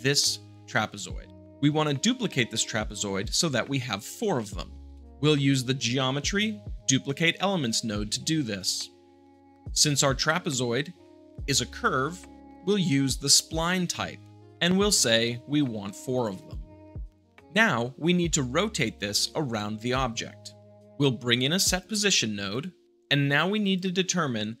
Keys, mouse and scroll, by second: 0.0-1.0 drag, 3.9 middle click, 4.3 shift+middle click, 4.8 shift+a, 7.0-8.0 drag, 8.5 click, 11.6-12.4 drag, 13.5 click, 15.8-16.8 drag, 17.1 middle click, 19.4-20.5 shift+middle drag, 21.6-22.6 drag, 22.8 g, 23.6-24.6 drag.